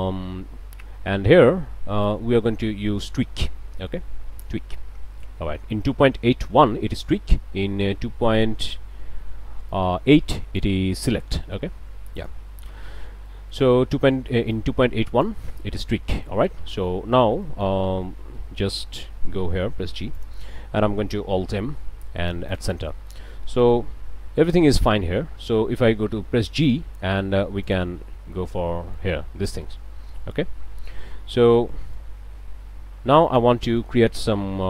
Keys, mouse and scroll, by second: 2.0-4.6 drag, 8.4 click, 9.7-10.8 drag, 12.2 click, 13.3 click, 14.5 click, 16.2 click, 17.1 scroll down 1, 17.4 click, 17.8 a, 19.3 g, 20.2 click, 20.6 scroll up 2, 21.6 alt+m, 22.5 click, 22.9 click, 24.1 g, 27.6 click, 28.8 shift+click, 29.2 shift+click, 30.5 click, 31.7 click, 32.5 g, 33.2 click, 33.6 click.